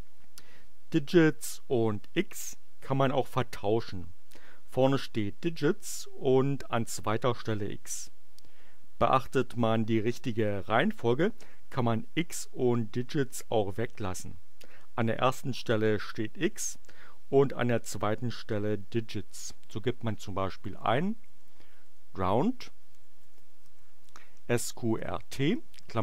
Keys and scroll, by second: 20.4-26.0 typing.